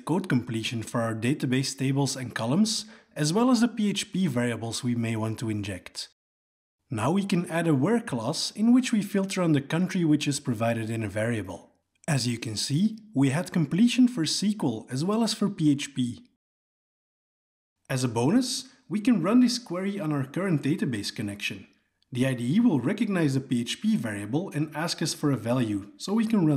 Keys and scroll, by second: 5.4 Tab, 13.4 ctrl+space, 15.4 Return, 17.9 alt+Return, 20.3 alt+Return.